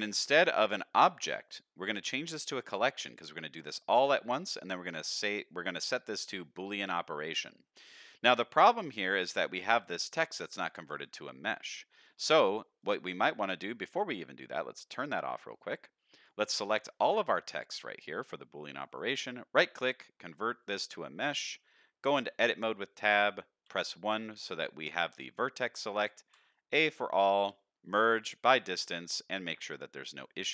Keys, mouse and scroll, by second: 0.1 click, 1.4-2.4 drag, 3.5-7.3 drag, 8.1 middle drag, 8.7-9.0 middle drag, 9.3 click, 9.7-10.2 middle drag, 10.8 shift+click, 11.1 middle drag, 12.0 shift+click, 12.3 middle drag, 12.7 click, 14.9 click, 16.1 click, 17.9 shift+click, 18.9 right click, 21.3 middle click, 22.3 Tab, 26.3 p, 26.3 a, 27.4 m, 29.9 middle click.